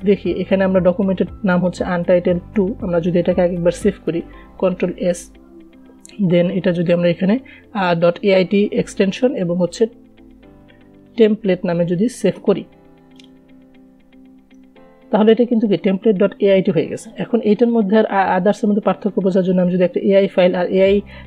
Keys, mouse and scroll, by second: 3.5 ctrl+Num_Lock, 5.3 ctrl+s, 7.3 click, 10.3-12.4 typing, 13.6 click.